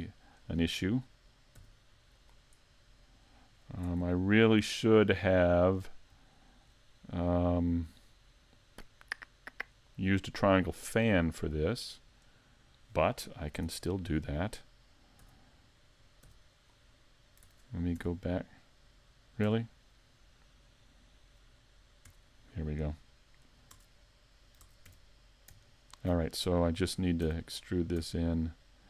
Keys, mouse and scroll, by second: 0.4 right click, 1.6 x, 2.6 middle click, 3.6 scroll up 2, 4.7 right click, 5.1 middle click, 5.8 scroll up 2, 6.4 shift+middle click, 7.3 middle click, 13.6 z, 15.2 z, 16.2 x, 17.4 Tab, 18.0 2, 19.6 1, 22.1 `, 22.8 right click, 23.7 Tab, 24.6 ctrl+Tab, 25.6 alt+right click, 27.3 e, 27.5 click, 28.0 s.